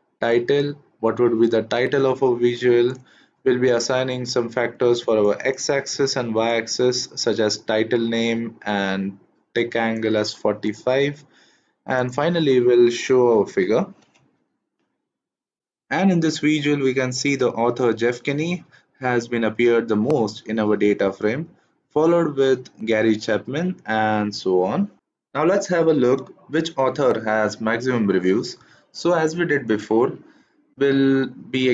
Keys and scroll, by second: 13.4 shift+Return.